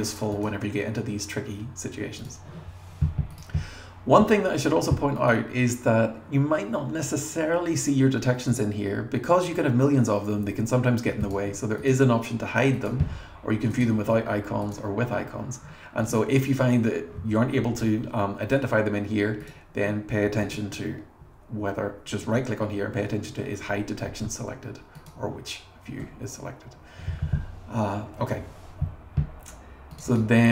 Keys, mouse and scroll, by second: 3.3 click, 5.2 click, 8.5 click, 11.2 click, 12.7 click, 13.7 click, 14.6 click, 15.1 scroll down 1, 16.0 click, 19.4 click, 25.0 click, 26.0 scroll down 2, 30.0 click, 30.1 click.